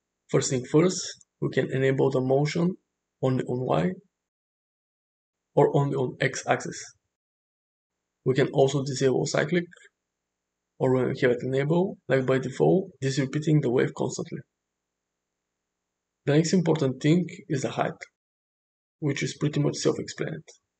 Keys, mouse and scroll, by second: 1.2 click, 4.8 click, 5.9 click, 9.3 click, 12.9 click, 16.6-20.7 drag.